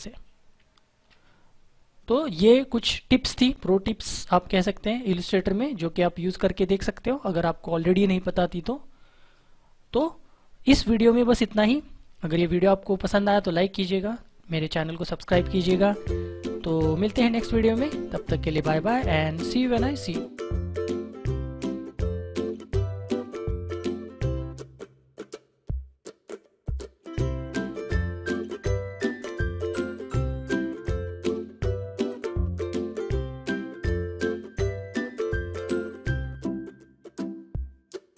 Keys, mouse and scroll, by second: 0.5 ctrl+0.